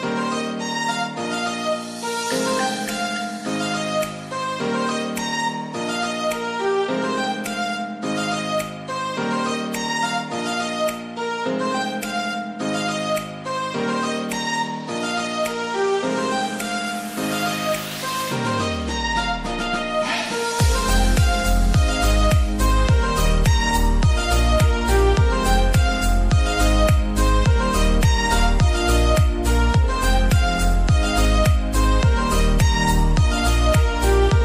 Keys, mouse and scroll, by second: 0.8 Tab, 1.2 click, 1.9 click, 2.1 KP_1, 2.2 KP_3, 2.3 click, 2.6 click, 2.8 Tab, 2.9 click, 3.1 KP_3, 3.3 KP_1, 3.4 ctrl+3, 3.6 shift+click, 4.2 ctrl+z, 4.2 click, 4.6 ctrl+shift+click, 4.8 click, 5.2 click, 5.3 shift+d, 6.1 click, 7.3 click, 8.6 Tab, 8.8 Tab, 9.2 click, 9.6 click, 10.0 click, 10.6 click, 10.7 click, 11.0 click, 11.5-14.1 typing, 11.8 click, 11.9 ctrl+s, 12.3 Tab, 12.4 click, 12.5 Delete, 12.8 Delete, 13.4 Tab, 13.5 click, 14.4 Tab, 14.4 click, 14.6 click, 15.0 click, 15.2 KP_1, 15.3 f, 16.0 click, 16.6 g, 16.9 click, 17.4 KP_1, 17.5 KP_1, 17.6 g, 18.2 click, 18.6 click, 18.9 click, 19.5-23.1 typing, 19.8 click, 21.2 click, 21.4 click, 22.3 ctrl+r, 22.4 click, 24.3 g, 24.8 Delete, 24.9 ctrl+z, 25.2 Delete, 25.2 click, 25.7 click, 26.2 ctrl+KP_3, 26.4 ctrl+KP_3, 26.5 click, 26.7 Tab, 26.9-28.1 typing, 27.2 Tab, 27.2 click, 27.4 Tab, 27.8 Tab, 28.3 click, 28.8 ctrl+r, 28.8 click, 29.1 Tab, 29.3-31.9 typing, 29.5 click, 29.8 ctrl+r, 29.8 click, 30.4 click, 30.8 ctrl+r, 31.3 Tab, 31.6 Tab, 31.6 click, 32.2 Tab, 32.3 ctrl+s, 32.4 click, 33.5 ctrl+s, 33.9 right click, 34.2 ctrl+KP_1.